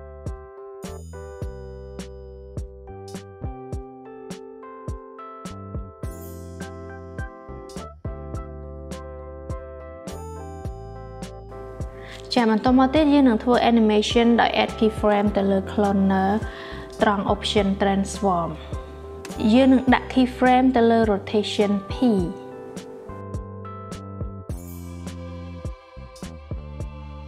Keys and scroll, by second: 16.5 0, 17.0 Return, 20.2-21.3 typing.